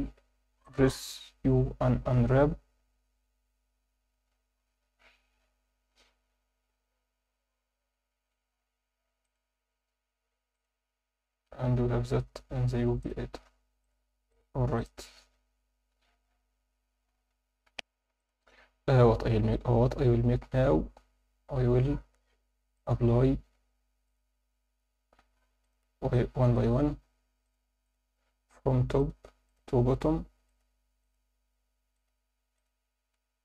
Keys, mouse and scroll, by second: 0.0 u, 7.4 Tab, 8.1 Tab, 9.2-10.6 drag, 10.7 Tab, 11.3-12.2 scroll up 2, 11.8 a, 12.4 s, 13.0 click, 13.8-14.9 drag, 16.1 Tab, 17.6 F9, 17.7 F10, 18.2 click, 22.7-25.0 drag, 25.6-27.0 drag, 27.4-28.7 drag, 29.0-30.1 drag, 30.4-31.6 drag, 31.9-33.0 drag.